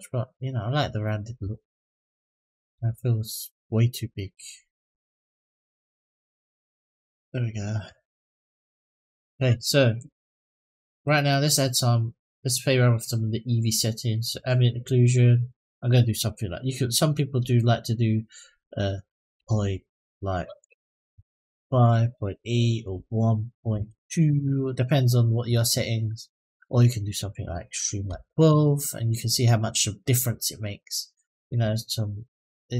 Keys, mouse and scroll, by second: 2.4 s, 6.5-6.9 scroll up 2, 7.0-7.6 shift+middle drag, 7.9-9.0 scroll down 1, 9.0 click, 12.0 click, 14.1 click, 14.8 click, 15.3-21.3 drag, 22.6-24.1 drag, 26.9-28.3 drag.